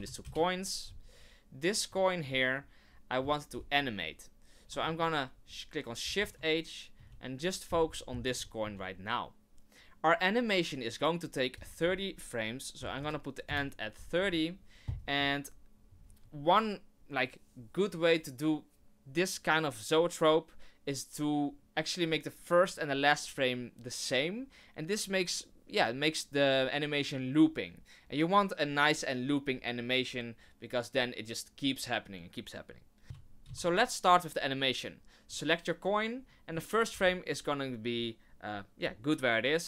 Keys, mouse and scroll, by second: 1.9 click, 2.2 click, 6.0 shift+h, 6.9 KP_1, 7.8-8.4 scroll up 9, 8.4 shift+middle click, 11.5 click, 14.0-14.5 scroll up 1, 33.0 ctrl+i, 33.1 ctrl+z, 33.7 ctrl+z, 35.3 right click, 36.9 i.